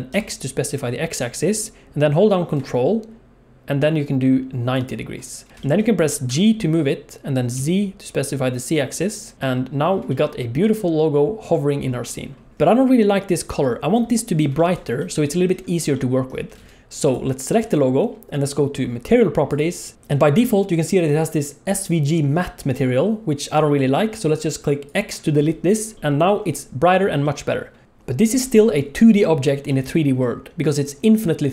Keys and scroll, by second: 6.3 g, 12.5 alt+a, 16.6 alt+a.